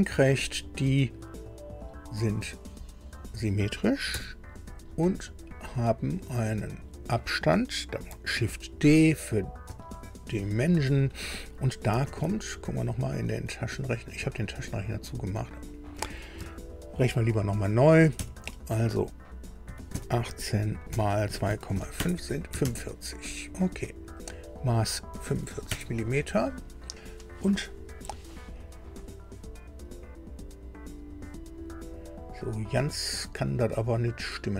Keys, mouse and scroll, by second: 0.4 click, 1.8 click, 3.1 click, 4.1 s, 5.4 click, 6.7 click, 9.6 shift+d, 12.1 alt+Tab, 14.2 alt+Tab, 18.2 ctrl+alt+r, 19.6 KP_1, 19.9 KP_8, 21.3 KP_2, 21.7 KP_5, 22.0 KP_Enter, 22.7 alt+Tab, 24.2 click, 25.1 KP_4, 25.3 KP_5, 25.7 KP_Enter.